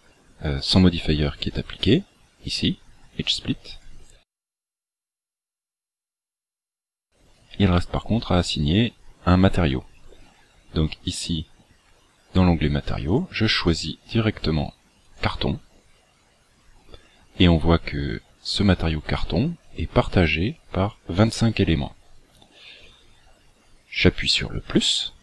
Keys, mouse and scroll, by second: 1.7 click, 3.7 click, 5.3 shift+middle click, 13.1 click, 24.7 click.